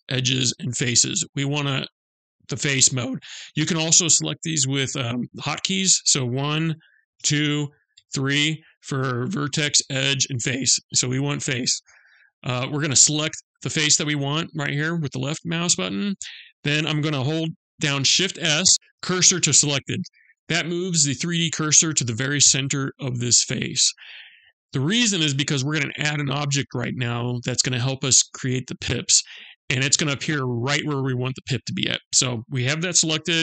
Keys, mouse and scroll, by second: 0.2 click, 6.2 click, 6.2 1, 6.6 2, 7.4 3, 10.5 3, 12.8 click, 18.0 shift+s.